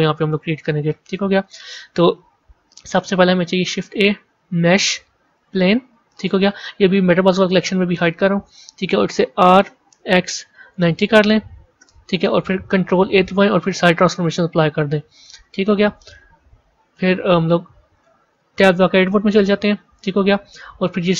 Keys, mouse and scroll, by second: 1.0-3.5 middle drag, 3.5 shift+a, 7.8 click, 9.2 r, 12.9 ctrl+a, 15.3 shift+middle click, 16.0-16.5 scroll up 3, 16.9 KP_1, 17.2-17.5 scroll up 3, 17.8 shift+middle click, 18.6 b.